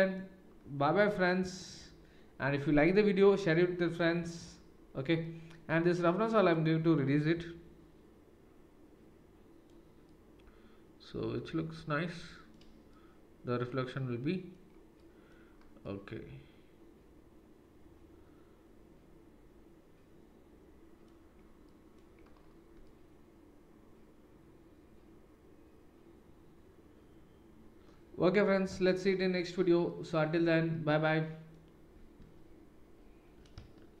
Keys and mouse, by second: 3.9 click, 4.0-6.5 middle drag, 6.5-34.0 drag.